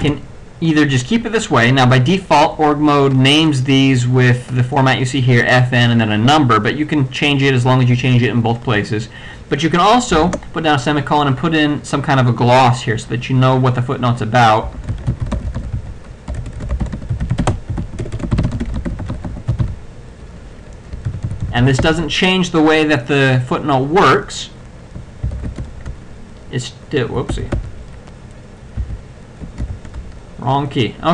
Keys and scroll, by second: 0.1 BackSpace, 10.3 shift+;, 14.6-20.1 typing, 21.2 ctrl+b, 21.8 ctrl+t, 25.3 ctrl+c, 25.6 ctrl+x, 25.6 ctrl+Caps_Lock, 25.6 ctrl+o, 27.3 ctrl+g, 28.8 ctrl+c, 29.8 k.